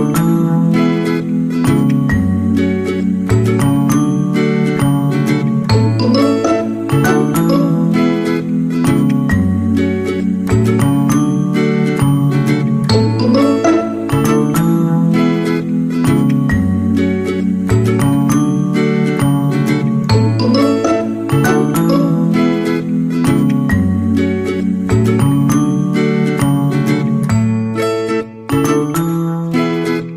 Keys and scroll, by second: 0.6 ctrl+z.